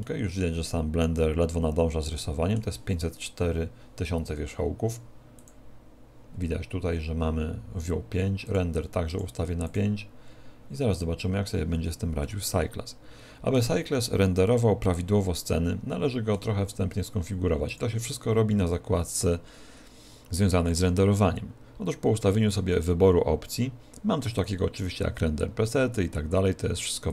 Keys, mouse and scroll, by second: 0.2 middle click, 5.8 click, 8.8 click, 9.4 click, 12.5 middle click, 14.3 middle click, 18.0 click.